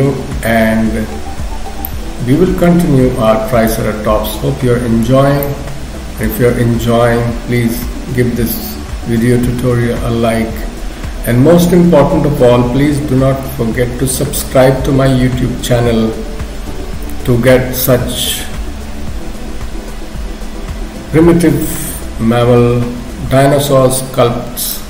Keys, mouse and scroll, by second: 1.9 middle click, 5.5 shift+middle click, 6.0 shift+middle click, 24.7 middle click.